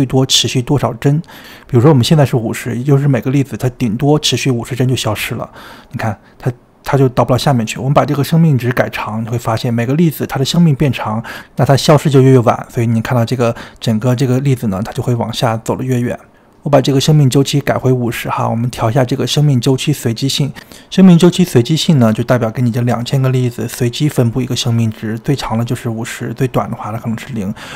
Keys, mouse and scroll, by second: 0.3-0.8 scroll down 2, 0.8-4.2 shift+middle drag, 4.2 click, 4.8-5.7 middle drag, 5.7-7.2 scroll up 4, 7.2-8.7 shift+middle drag, 8.7-11.5 drag, 11.5-12.2 scroll down 2, 12.2-15.1 middle drag, 15.1-19.3 drag, 21.4-23.8 middle drag, 23.8-27.7 drag.